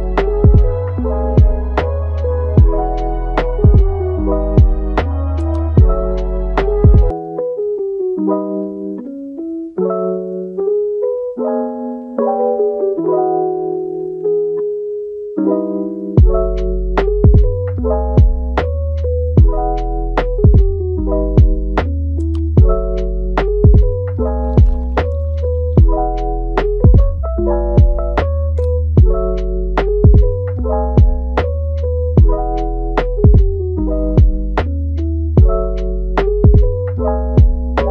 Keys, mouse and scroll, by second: 0.3 g, 2.4 ctrl+click, 4.1 g, 6.6 shift+click, 7.1-7.8 middle drag, 7.8 shift+click, 8.2 shift+click, 8.8 shift+click, 9.3 g, 10.7 shift+click, 11.2 g, 12.5 shift+drag, 12.9-14.3 middle drag, 14.3 g, 15.4 scroll down 2, 15.6-16.3 middle drag, 16.3 g, 22.5 scroll down 1, 22.7-23.0 scroll up 3, 23.0-24.6 middle drag, 24.6-25.5 scroll down 1, 25.5-25.9 scroll up 3, 25.9-27.7 middle drag, 27.7-28.6 scroll down 2, 28.6 scroll down 1, 28.7-33.2 right drag, 33.2 Tab, 33.3-33.8 scroll up 1, 33.8 shift+middle click, 34.3 a, 34.6 scroll up 2, 34.9-37.9 middle drag.